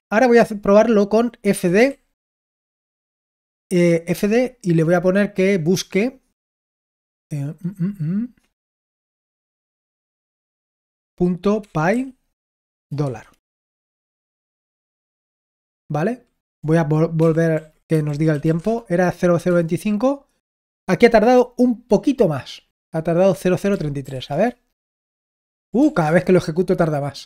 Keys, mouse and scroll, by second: 1.3-2.2 typing, 9.6 typing, 11.6 typing, 13.0 typing, 14.5 Return, 17.1 ctrl+p, 17.5 ctrl+a, 17.7-18.9 typing, 19.4 Return, 24.0 ctrl+p, 24.3 Return, 25.8 ctrl+p, 26.0 Return.